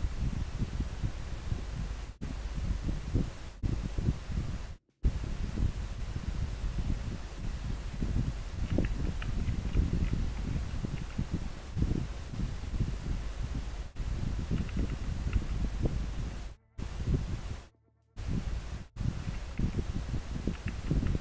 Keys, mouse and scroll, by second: 9.5 scroll down 1, 10.1 scroll up 1.